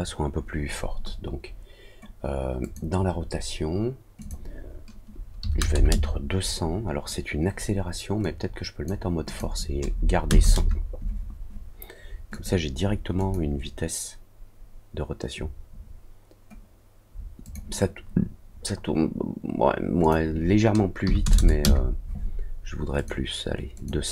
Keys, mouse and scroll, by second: 2.6 click, 4.1 click, 8.2 click, 9.2 click, 12.3 click, 13.1 click, 17.4 click, 20.0 click, 22.9 click, 23.7 click.